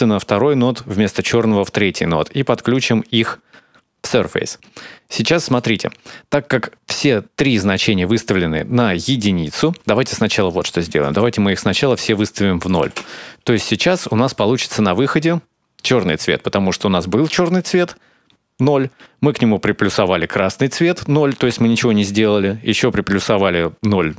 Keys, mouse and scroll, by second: 2.5 click, 10.2 click, 11.5 click, 12.4 click, 14.4 click.